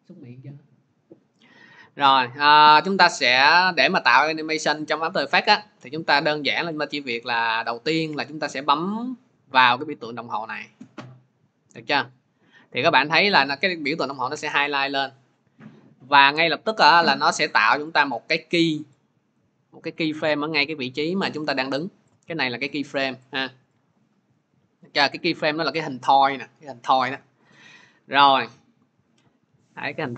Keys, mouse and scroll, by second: 10.6 click, 17.7 click, 18.0 click, 19.2 click, 20.7 click, 21.0 click, 22.5 click, 22.9 click, 23.6 click, 24.3 click, 25.0 click, 27.4 click, 28.9 click.